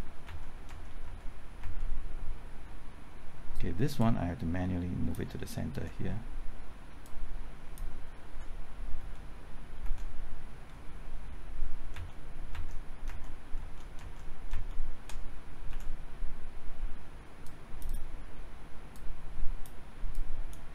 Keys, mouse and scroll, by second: 0.2 alt+Right, 0.7 alt+Right, 1.0 alt+Right, 1.6 alt+Right, 4.0 click, 5.7 Left, 7.0 click, 8.2 Left, 9.0-9.8 typing, 11.0-14.0 typing, 11.9 alt+Right, 12.5 alt+Right, 13.1 alt+Right, 14.0 alt+Right, 15.7 Left, 17.4-18.9 drag.